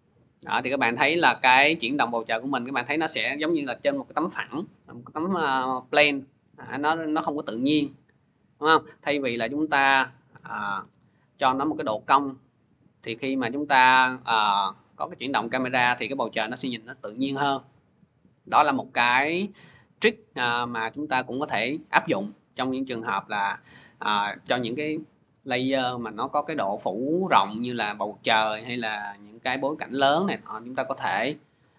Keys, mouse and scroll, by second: 8.4 click, 9.6 click, 10.2-10.6 typing, 11.1 click, 14.3-14.7 drag, 16.0-24.2 drag.